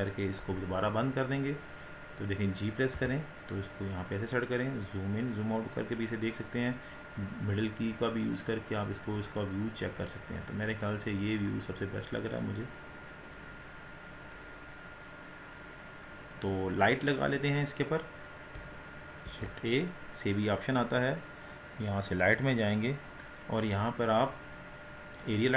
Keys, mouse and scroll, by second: 1.9 click, 3.0 g, 5.0 scroll down 1, 5.9-9.4 middle drag, 9.4-9.8 scroll down 4, 9.8 scroll up 5, 10.5 middle click, 11.2-11.7 scroll down 2, 11.7 scroll up 4, 13.2 scroll down 2, 13.6-14.7 middle drag, 14.7-15.4 scroll up 3, 15.4 scroll down 2, 16.1 click.